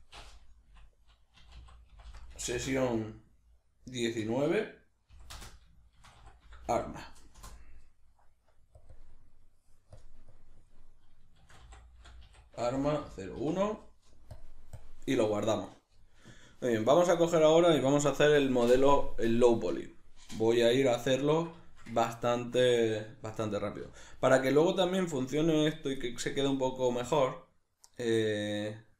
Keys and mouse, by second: 23.8 alt+q.